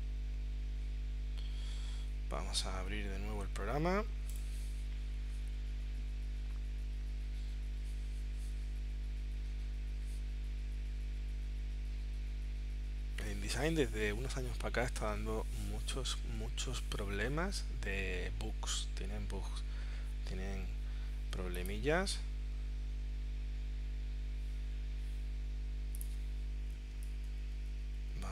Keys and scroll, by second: 27.0 space.